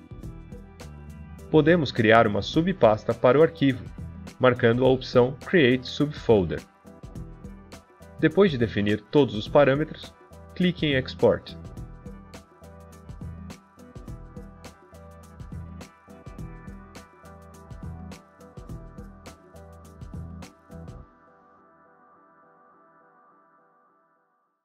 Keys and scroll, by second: 8.0-10.0 typing.